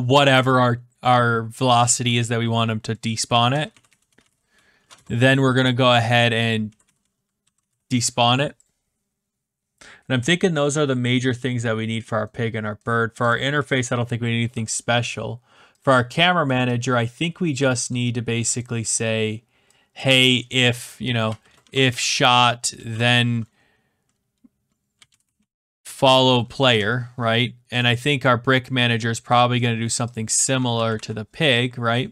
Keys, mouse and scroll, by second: 3.0-5.2 typing, 6.4-8.1 typing, 8.6 click, 11.1 click, 12.8 middle click, 13.3 click, 14.6 middle click, 17.6 click, 17.9 click, 19.9 click, 20.2 click, 20.9-22.8 typing, 23.0 Return, 24.7-27.8 typing, 27.8 click, 29.5 middle click, 30.1 click, 30.8 ctrl+c, 30.9 ctrl+v.